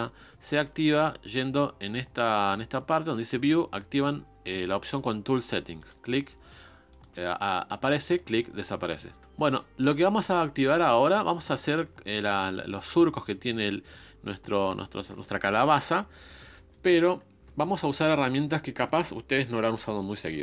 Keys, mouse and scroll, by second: 5.8-9.2 drag, 9.2-11.7 shift+middle drag, 13.5-14.0 scroll down 3, 14.0-14.9 scroll up 1, 14.9-20.4 shift+middle drag.